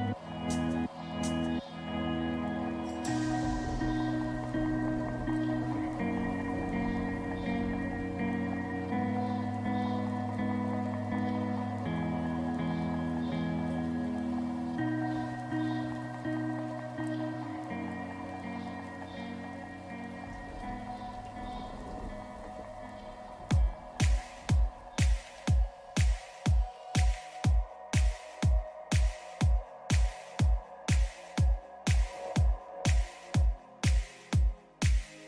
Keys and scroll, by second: 11.7 Up.